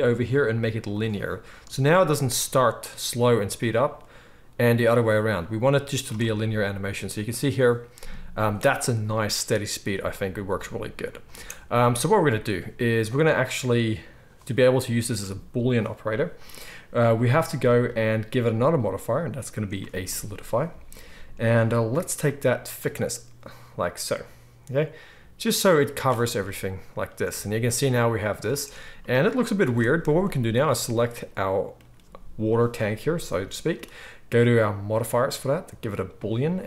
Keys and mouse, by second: 6.1 space, 11.2 space, 27.0-36.6 drag, 27.0-30.6 middle drag, 27.0-30.6 right drag, 27.3 space, 28.4 space, 29.7 ctrl+s, 35.0-36.6 middle drag, 35.0-36.6 right drag.